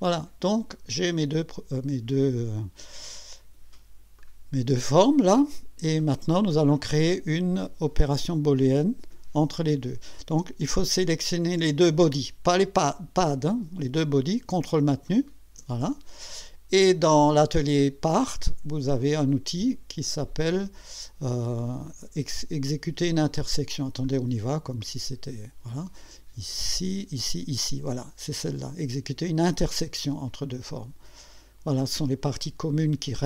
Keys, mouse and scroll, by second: 0.1-2.3 drag, 4.2-6.6 drag, 11.2 click, 15.1 ctrl+click, 24.0 click, 24.8 click, 30.4 click, 32.7-33.2 drag.